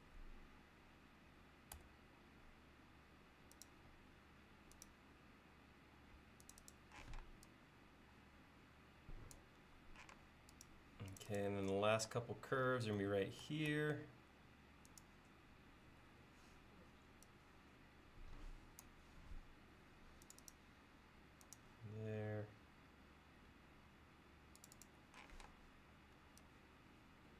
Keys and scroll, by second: 1.8 a, 7.1 p, 10.2 space, 13.8 a, 25.3 p.